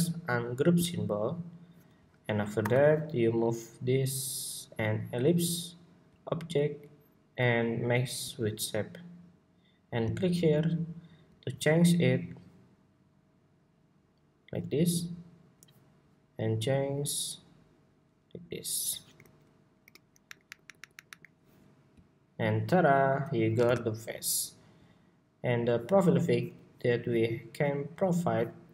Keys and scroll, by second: 2.3 super+y, 24.1 super+=.